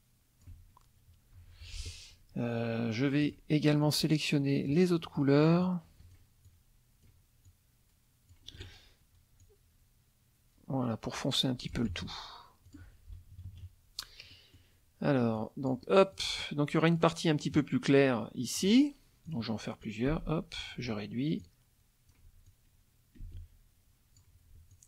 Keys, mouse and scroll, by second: 0.5 F1, 1.4 F2, 3.2 click, 3.8 click, 5.0 middle click, 5.6 shift+click, 6.5 shift+click, 7.5 shift+click, 9.4-11.9 drag, 11.9 F1, 12.7 click, 13.2 KP_Subtract, 14.3 middle click, 15.4 click, 16.1-17.2 drag, 18.6 click, 19.3 click, 19.8-20.8 drag, 20.1 space, 21.4 ctrl+click, 22.5-24.4 ctrl+drag, 23.2 space, 24.7 ctrl+click.